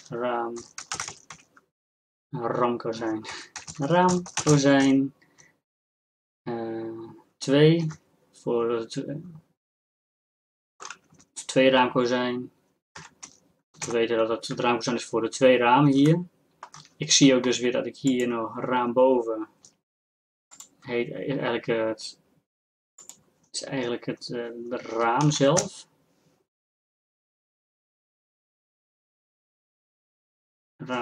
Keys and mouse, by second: 3.7 a, 18.1-20.0 drag, 20.0 g, 23.1-25.4 drag, 25.4 a.